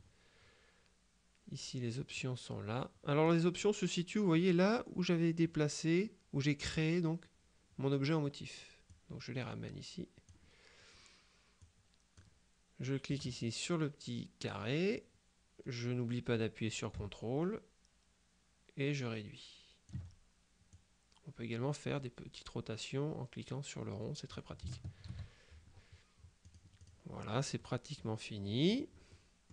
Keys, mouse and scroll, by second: 2.2-3.8 drag, 9.0-10.8 drag, 11.7 click, 14.5-20.5 drag, 20.8-24.9 drag, 25.1 ctrl+z, 26.5-27.4 drag, 27.6 click, 29.2 middle click.